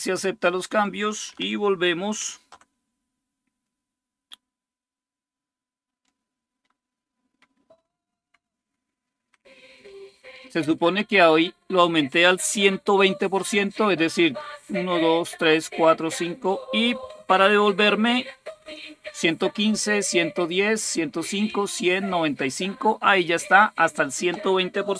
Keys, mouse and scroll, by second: 2.0 super+8.